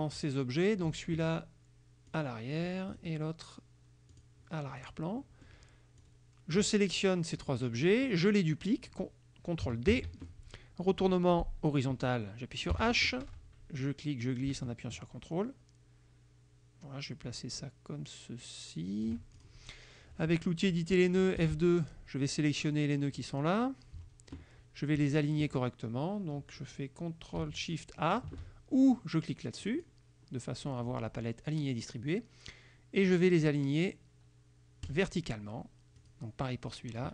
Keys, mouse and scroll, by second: 2.1 click, 3.0 click, 4.2 click, 4.9 click, 5.3 middle click, 6.1 click, 10.0 ctrl+d, 12.8 h, 13.9-19.3 drag, 19.4 ctrl+click, 21.5 F2, 21.9 click, 22.8 click, 29.7 click, 35.0 click, 36.1 click, 36.8 click.